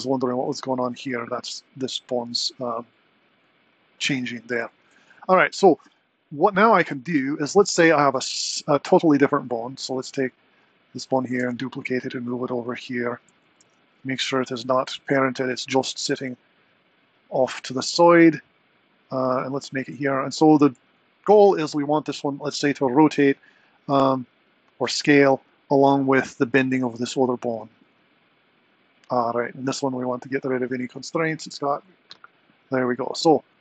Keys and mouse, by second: 5.0 super+z, 9.0 Tab, 10.1 click, 11.4 shift+d, 13.7 alt+p, 18.7 s, 19.6 g, 27.6 Tab, 29.6 click, 31.8 click.